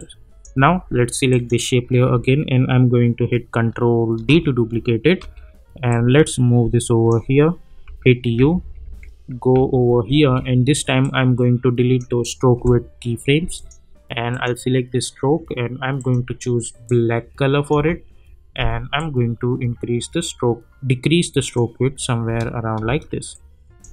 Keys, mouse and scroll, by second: 0.0-0.6 drag, 4.1 ctrl+d, 5.2 =, 5.9-7.1 drag, 7.6-10.3 typing, 11.0-12.3 drag, 17.7 Return, 18.9-21.8 drag, 22.2 space, 23.3-23.9 click, 23.8 space.